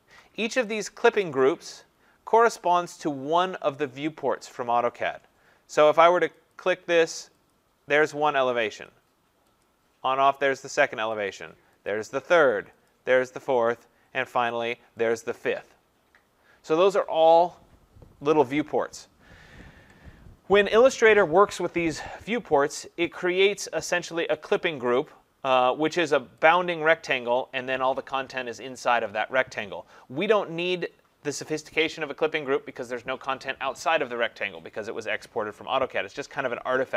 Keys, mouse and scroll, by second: 0.8 click, 6.5 click, 7.5 click, 8.9 click, 9.6 click, 11.3 click, 11.9 click, 12.9 click, 13.4 click, 14.5 click, 15.2 click, 26.5 click.